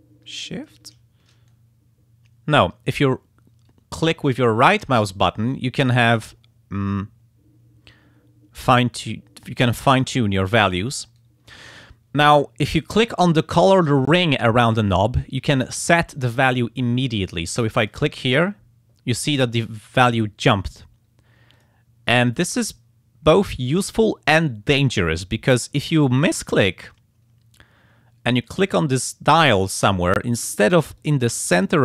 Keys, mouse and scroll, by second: 1.5-2.8 shift+right drag, 4.3-11.4 right drag, 17.8 click, 21.5 click, 23.3 click, 28.7 click, 29.4 click, 31.0-31.8 drag.